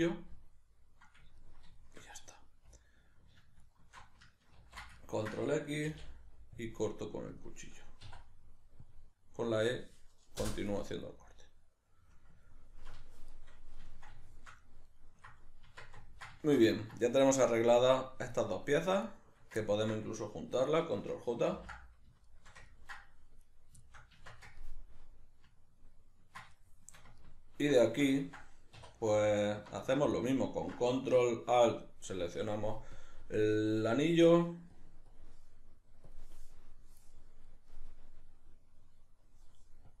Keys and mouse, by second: 2.8 alt+right click, 3.6 alt+shift+right click, 4.6 ctrl+x, 5.0-17.9 ctrl+middle drag, 5.9 k, 15.7 Tab, 17.9 right click, 18.3 right click, 19.1 shift+right click, 19.6-23.5 ctrl+middle drag, 21.5 ctrl+j, 23.5 right click, 23.8-30.1 shift+middle drag, 24.2 Tab, 28.8 2, 30.1 ctrl+alt+right click, 33.0-37.1 drag, 37.1-39.9 middle drag, 39.9-40.0 drag.